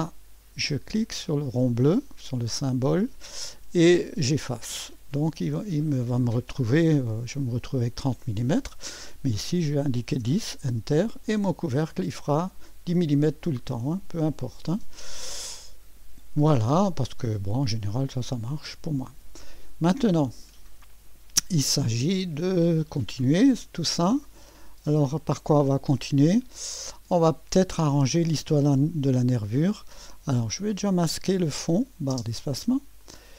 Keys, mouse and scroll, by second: 0.0 click, 2.1 click, 4.2 click, 7.1 click, 8.2-9.8 drag, 9.8 1, 10.1 0, 10.4 Return, 11.9-16.1 drag, 16.1-16.7 scroll up 1, 16.7 right click, 17.3-26.5 drag, 17.3-17.9 typing, 17.8 right click, 30.4-31.6 drag, 32.1 space, 33.0 click.